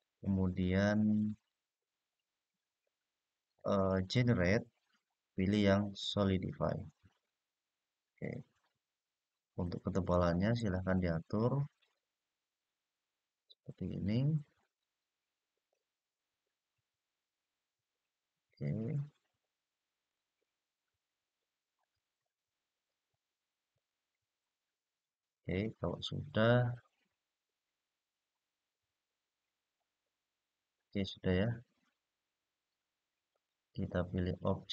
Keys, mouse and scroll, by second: 9.8 click, 10.1 click, 10.5 click, 10.9 click, 11.5 click, 14.3 click, 15.4-19.8 middle drag, 21.5 click, 23.5 click, 25.1 click, 25.6-26.0 scroll down 1, 26.4-30.6 middle drag, 33.0-34.0 drag.